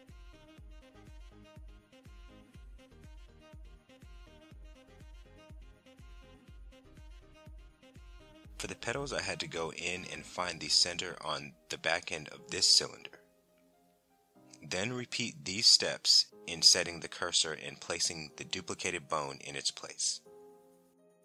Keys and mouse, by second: 0.2 Tab, 0.4 shift+s, 1.0 Tab, 1.8 Tab, 1.9 Tab, 2.1 shift+s, 2.7 click, 3.0 Tab, 3.3 shift+d, 3.5 right click, 3.6 shift+s, 4.3 click, 5.5 click, 5.7 middle click, 7.2 Tab, 7.4 Tab, 8.2 shift+middle click, 12.2 click, 13.3 click, 13.9 click, 15.4 shift+s, 18.5 Tab, 21.1 click.